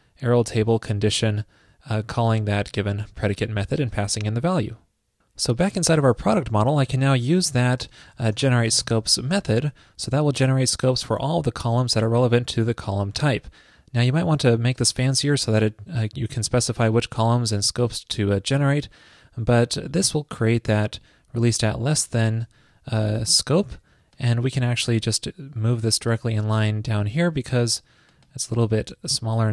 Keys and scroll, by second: 23.3 super+c, 27.5 super+v, 27.6 super+x, 28.6 super+v.